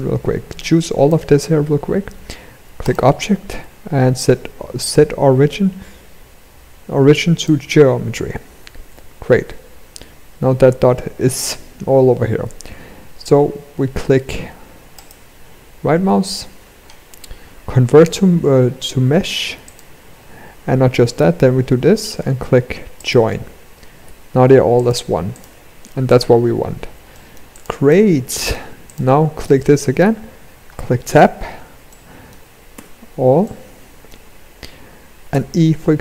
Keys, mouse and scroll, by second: 14.5 right click, 20.5 right click, 23.6 g, 24.8 click, 25.6 click, 26.6 middle click, 27.0 click, 27.4 middle click, 28.4 click, 29.0 middle click, 30.3 Tab, 31.4 middle click, 32.3 a, 32.9 middle click, 34.8 e.